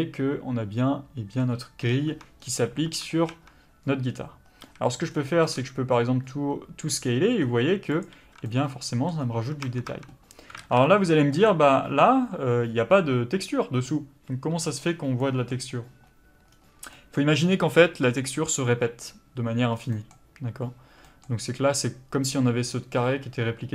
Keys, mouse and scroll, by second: 2.1 Tab, 4.6 a, 5.6 s, 8.2 Tab, 8.4 middle click, 9.2 scroll up 1, 9.3 Tab, 10.6 alt+a, 11.4 click, 15.3 middle click.